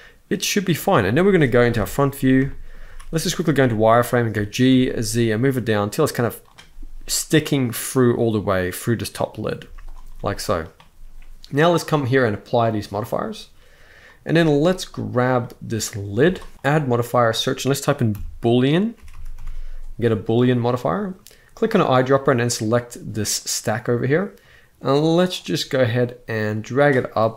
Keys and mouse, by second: 1.4 KP_1, 2.2 shift+middle drag, 2.6 z, 4.0 g, 4.4 z, 9.3 z, 9.9-10.3 middle drag, 11.9-12.3 drag, 12.6-13.1 drag, 13.8 middle click, 14.5 click, 15.1-15.6 middle drag, 15.9 g, 16.3 right click, 16.5-20.2 drag, 18.8 o, 21.3 click, 25.0-26.6 drag.